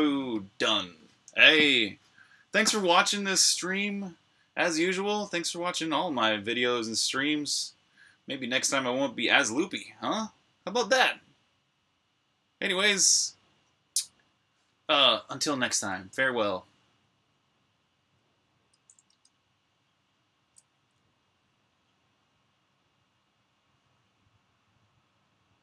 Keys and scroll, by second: 18.9 super+Tab.